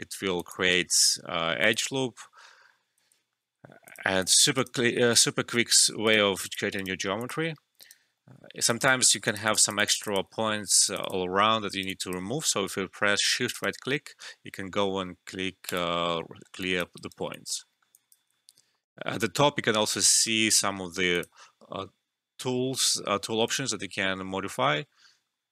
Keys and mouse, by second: 0.3 ctrl+click, 0.8 alt+middle click, 1.6 ctrl+click, 3.0-3.4 typing, 3.1 alt+shift+middle click, 3.8 click, 4.5 right click, 5.7 click, 6.0 right click, 6.4 click, 6.7 right click, 7.1 click, 7.8 right click, 8.1 alt+middle click, 8.6 click, 10.3 alt+middle click, 10.7 click, 11.4 alt+middle click, 11.6 alt+right click, 11.8 alt+click, 13.5 shift+right click, 15.6 click, 16.3 alt+middle click, 16.6 alt+click, 16.9 alt+right click, 17.3 alt+click, 17.7 alt+middle click, 17.9 alt+click, 21.1 click, 23.4 click.